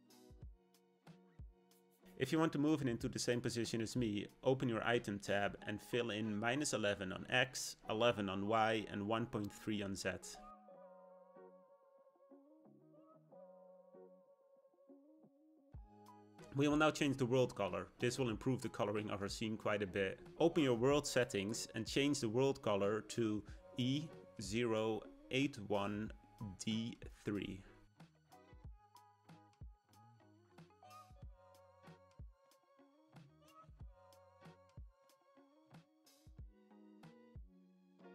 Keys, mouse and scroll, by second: 1.7-6.1 drag, 6.1 1, 7.5 1, 10.6 click, 17.2 click, 21.1 click.